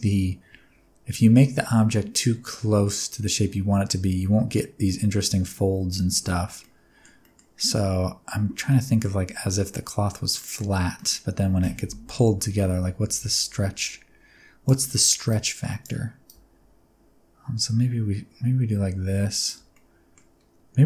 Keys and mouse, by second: 6.6-7.0 middle drag, 7.2 middle click, 8.7 middle click, 10.4 middle click, 11.0 middle click, 13.1-14.7 shift+drag, 15.3 click, 16.3-19.5 shift+drag, 19.7 middle click.